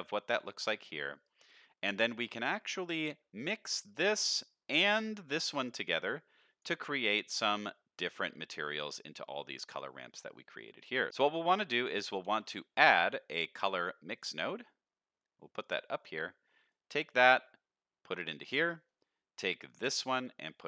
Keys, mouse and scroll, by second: 0.6 middle click, 1.2 click, 1.8 middle click, 2.4 middle click, 3.8 click, 4.2 middle click, 4.8 click, 5.8 middle click, 6.4 click, 7.6 middle click, 8.0 middle click, 9.8 middle click, 10.4 click, 11.1 ctrl+z, 11.9 middle click, 12.2 shift+a, 15.9 middle click, 16.8-18.5 drag, 18.9 middle click, 19.7-20.6 drag.